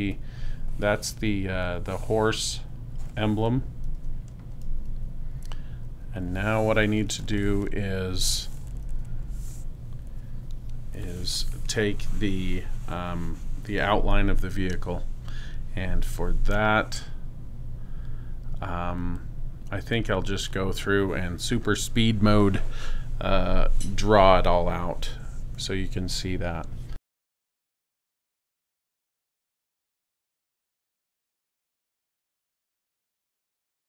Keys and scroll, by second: 4.0 super+-, 7.4 space, 8.9 super+-, 27.3 p.